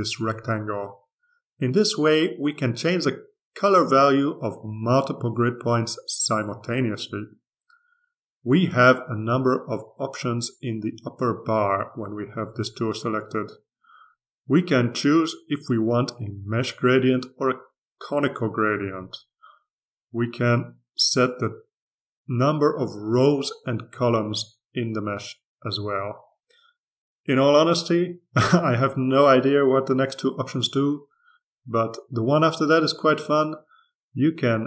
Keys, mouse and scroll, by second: 2.4-6.5 drag, 7.2 click, 8.2-10.0 drag, 16.6 click, 18.6 click, 22.3 click, 23.7 click, 24.6 click, 34.4 click.